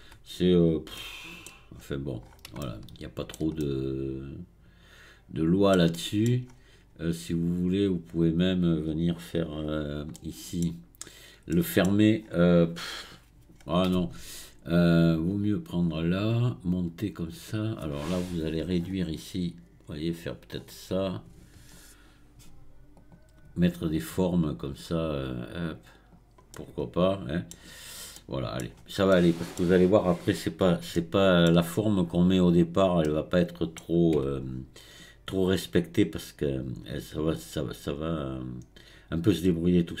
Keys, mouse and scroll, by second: 1.0 shift+middle click, 1.8-2.2 scroll up 1, 2.2-2.6 scroll down 1, 2.6-6.5 shift+middle drag, 6.5-8.3 scroll up 4, 8.3 click, 10.3-12.2 middle drag, 12.2 scroll down 4, 13.6 scroll up 2, 15.3 click, 17.2-20.3 drag, 23.0 click, 23.9-26.5 drag, 26.5-28.7 middle drag, 28.7-29.1 scroll down 1, 29.1-32.5 middle drag, 32.5-33.1 scroll up 1, 33.1-34.5 middle drag, 34.5 scroll down 2, 35.3-40.0 right drag.